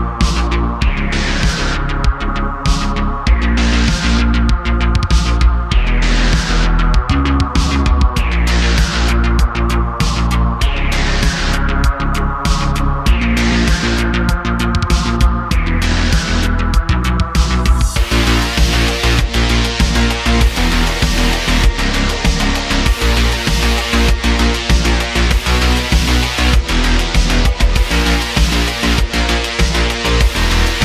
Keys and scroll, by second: 1.1 `, 3.6 g, 5.6 g, 9.3 g, 11.6 g, 13.9 g, 17.0 g, 18.7 g, 20.6 x, 21.6 g, 22.7 g, 26.2 `, 27.9 g, 29.8 g.